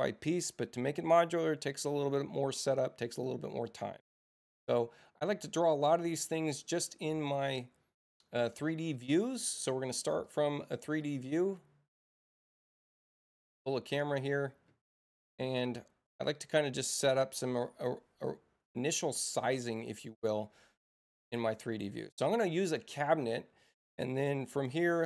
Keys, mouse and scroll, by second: 6.3 click, 7.5 click, 8.9 click, 10.2 click, 11.0 click, 12.5 click, 13.7 click, 19.3 click, 21.3 click, 23.9 right click, 24.9 click.